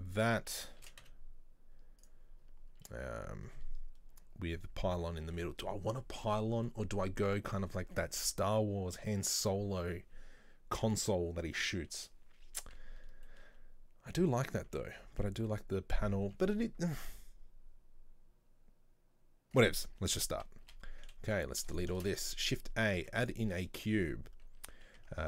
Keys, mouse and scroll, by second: 0.8 scroll up 2, 0.9 shift+d, 2.4-3.4 scroll down 1, 5.1-8.2 middle drag, 13.3-14.7 middle drag, 14.7 Tab, 15.1 Tab, 15.4 middle click, 16.1-17.7 scroll up 1, 19.6 right click, 20.7 a, 21.3 Delete, 22.0 shift+a, 23.7 shift+middle click, 24.0-24.8 scroll down 1, 25.0 Tab.